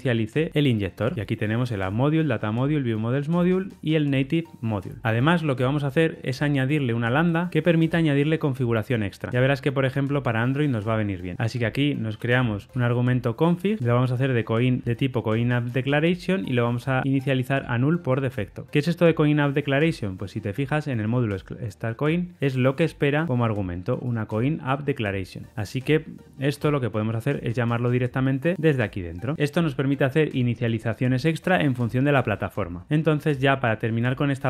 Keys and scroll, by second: 0.9 Tab, 9.3 Escape, 11.3 super+z, 15.3 Return, 16.5 Tab, 21.1 super+b, 24.8 super+[, 24.8 ctrl+alt+Left, 28.5 Tab, 32.8 super+[, 32.8 ctrl+alt+Left.